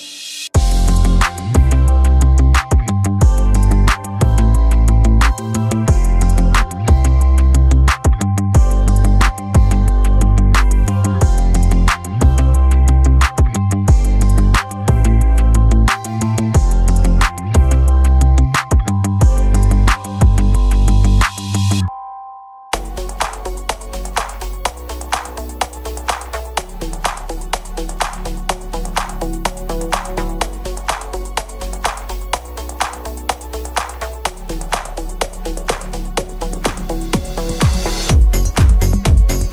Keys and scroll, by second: 3.5 Escape, 10.5 Escape, 17.8 Escape.